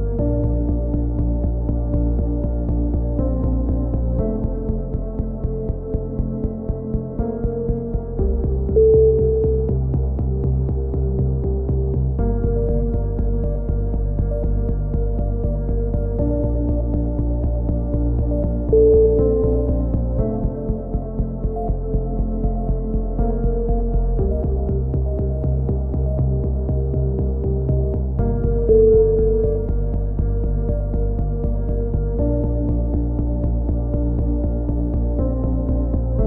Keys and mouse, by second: 1.6 click, 2.6 ctrl+r, 3.0 a, 3.5 ctrl+r, 3.8 a, 4.8-5.3 drag, 4.9 z, 5.3 c, 9.5 x, 9.5 z, 9.6-10.3 drag, 12.2 ctrl+z, 12.7-13.2 drag, 13.2 a, 13.3 middle drag, 13.6-14.3 drag, 14.6-15.7 drag, 15.7 ctrl+r, 15.7 middle click, 16.1 click, 16.5 ctrl+z, 16.9 ctrl+z, 17.8 KP_3, 18.3-18.8 drag, 18.9-19.5 right drag, 18.9 x, 20.0-20.9 drag, 20.0-21.4 right drag, 20.9 KP_3, 21.4 e, 22.8 a, 26.3-28.9 middle drag, 28.9 KP_3, 29.0 z, 31.8 z, 33.5 ctrl+r, 34.2 a, 34.5-36.2 drag.